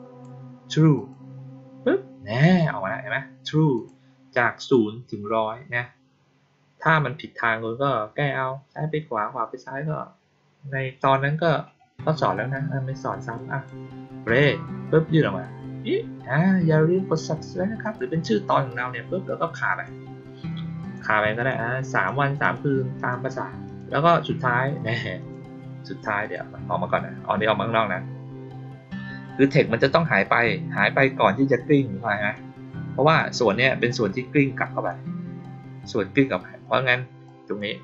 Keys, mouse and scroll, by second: 0.9 click, 2.3 click, 3.7 click, 13.3-13.6 drag, 14.2 click, 17.8 click, 19.6 click, 20.7 click, 21.3 click, 21.8 click, 22.3 click, 22.9 click, 23.6 click, 25.1 click, 26.1 click, 32.1 click, 33.0 click, 33.7-34.8 drag, 37.2-37.5 drag.